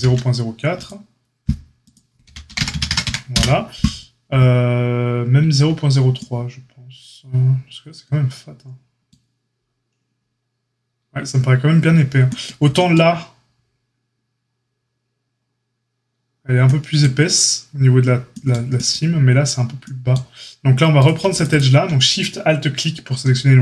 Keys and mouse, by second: 2.2 g, 20.9 click, 21.0 alt+middle click, 21.4 alt+shift+click, 21.5-23.6 alt+shift+middle drag.